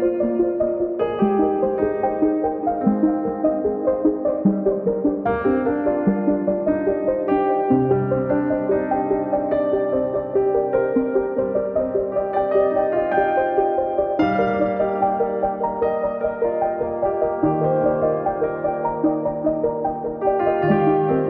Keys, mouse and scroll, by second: 1.6 shift+click, 2.5 u, 5.9 alt+click, 6.9 alt+shift+click, 15.8 alt+shift+click, 21.0 u.